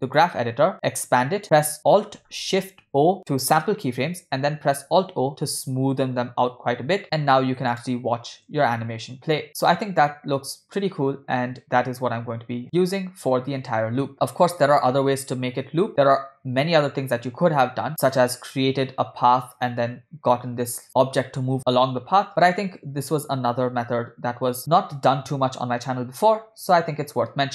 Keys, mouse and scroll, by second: 0.8 click, 1.4 ctrl+middle click, 3.1 alt+shift+o, 4.8 alt+o, 4.9 alt+o, 5.1-5.4 alt+o, 5.5 alt+o, 5.8-6.3 alt+o, 6.4 alt+o, 7.0 alt+o, 7.9 click, 8.6 space, 17.9 space, 22.3 space.